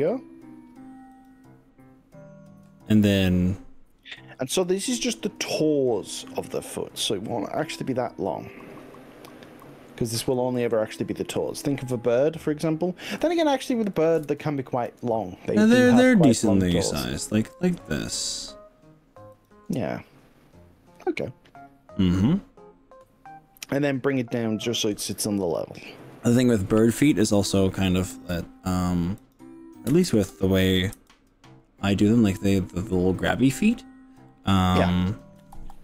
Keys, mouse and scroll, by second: 1.1 click, 4.5 g, 10.1 click, 10.3 ctrl+z, 10.7 ctrl+z, 13.3 g, 14.1 click, 14.3 ctrl+z, 14.9 e, 19.3 click, 28.1 e, 29.2 click, 30.1 ctrl+z, 31.1 g.